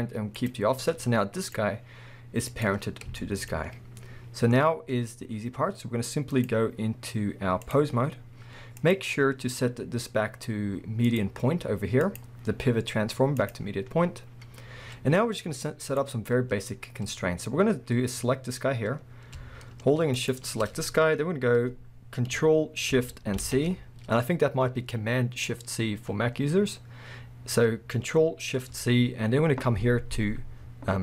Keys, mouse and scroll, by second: 0.9-1.4 scroll down 1, 1.4 click, 2.5 click, 3.2-6.3 shift+middle drag, 6.3-16.0 drag, 13.9-15.7 scroll up 2, 15.7 scroll up 1, 17.4-20.2 scroll up 2, 20.2 shift+click, 23.4 ctrl+shift+c.